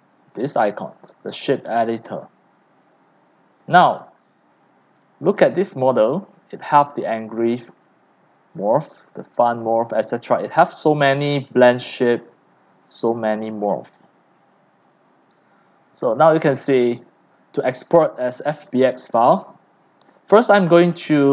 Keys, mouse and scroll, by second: 1.6 click, 2.2-4.2 drag, 4.2-6.6 middle drag, 7.1-8.3 drag, 10.9-12.5 scroll, 12.5 scroll, 12.6-14.8 scroll up 8, 14.8-16.4 scroll up 1, 16.4-17.0 scroll up 1, 17.1-21.3 drag.